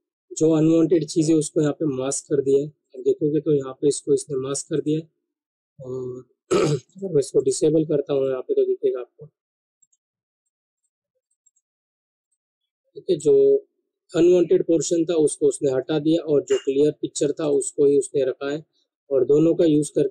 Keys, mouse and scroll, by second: 2.8 click, 7.3 right click, 8.1 click, 9.8 right click, 10.3 click, 11.4 right click, 12.2 click, 13.3 alt+scroll down 1, 15.0-15.8 alt+scroll up 1, 16.5 right click, 17.4 click, 19.6 alt+scroll down 1.